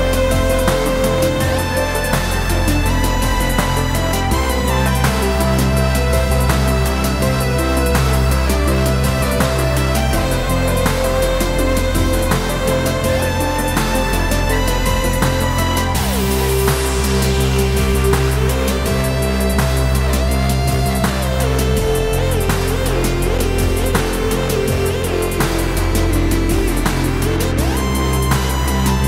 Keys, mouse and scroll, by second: 0.3 Escape, 0.8 2, 1.1 click, 1.6 ctrl+b, 3.1 click, 3.3 Tab, 3.6 click, 3.9 scroll down 1, 4.9 click, 5.5-9.5 middle drag, 6.0 scroll up 1, 7.1 scroll down 1, 9.5 shift+right click, 9.8-11.0 middle drag, 11.0-12.3 drag, 12.3-17.1 middle drag, 12.7 scroll down 1, 14.0 KP_Decimal, 14.8 r, 17.1 click, 17.3 middle click, 18.0 scroll down 1, 18.4 middle click, 18.9 KP_7, 19.7 shift+z, 20.2-22.1 middle drag, 20.2 g, 22.1 click, 22.6 shift+d, 24.5 Escape, 25.1 click, 25.7-27.4 drag, 28.9 click.